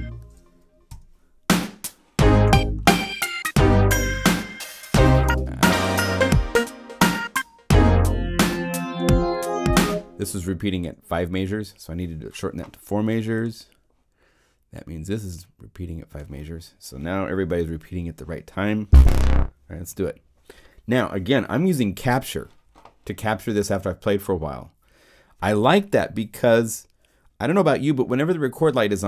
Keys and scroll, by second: 9.7 0, 19.9 0.